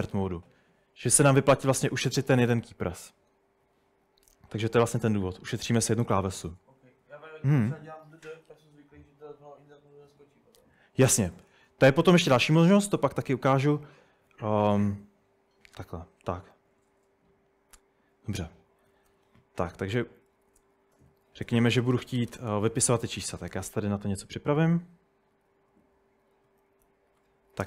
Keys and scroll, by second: 3.6 Escape, 13.4-14.3 typing, 19.2 typing, 20.3-27.6 typing, 27.0 Escape.